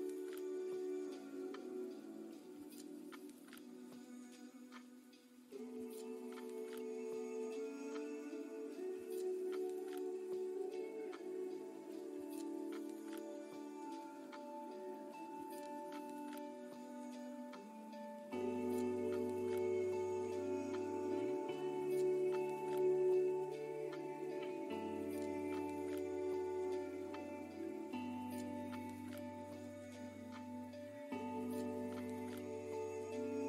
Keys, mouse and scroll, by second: 0.3 middle click, 2.8 scroll down 1, 3.6-4.3 scroll up 1, 5.3 click, 11.8 middle click, 13.1-13.6 scroll up 6, 13.9-14.3 scroll down 3, 14.7 scroll up 1, 15.8-16.3 scroll down 3, 16.4 middle click, 18.5-18.9 scroll up 2, 21.4 click, 28.5-28.8 scroll down 5, 29.0 middle click, 30.2-31.0 scroll up 5, 31.1 click, 31.4 middle click, 31.9 scroll up 2, 32.5 scroll down 2, 33.1 middle click.